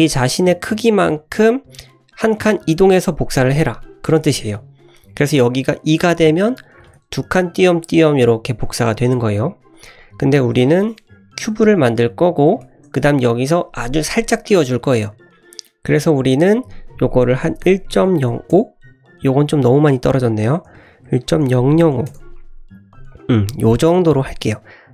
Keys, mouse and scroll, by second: 4.8-7.6 drag, 7.9-9.7 scroll down 1, 9.7-10.9 drag, 11.2 scroll up 2, 11.7 `, 12.0-12.5 scroll up 4, 12.6 shift+middle drag, 12.6 shift+scroll down 1, 12.9 scroll up 3, 15.2 click, 16.3-22.6 drag, 21.4 KP_0, 23.1 click, 23.8-24.2 scroll down 3, 24.2 middle drag, 24.5 click, 24.8 scroll down 1.